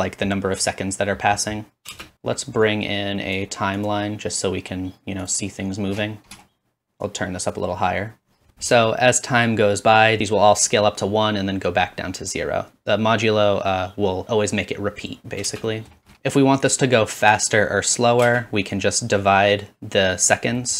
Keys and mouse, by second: 1.3-2.7 middle drag, 2.0 space, 2.7-9.5 drag, 8.5 space, 12.7-16.1 drag, 15.5 space, 18.3 space.